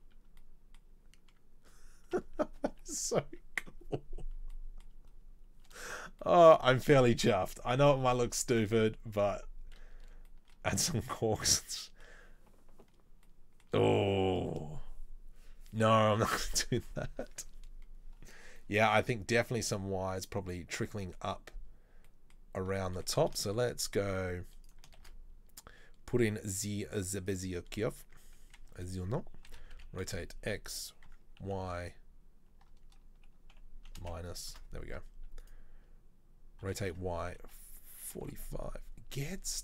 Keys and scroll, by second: 25.1 shift+a, 28.2 Tab, 28.8 a, 29.7 r, 36.7 g.